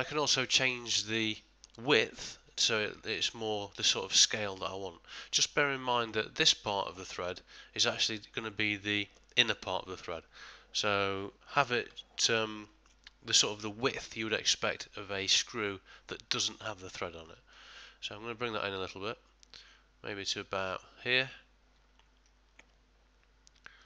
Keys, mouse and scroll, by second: 0.7 middle click, 0.8 ctrl+middle click, 5.8 middle click, 18.0 shift+click.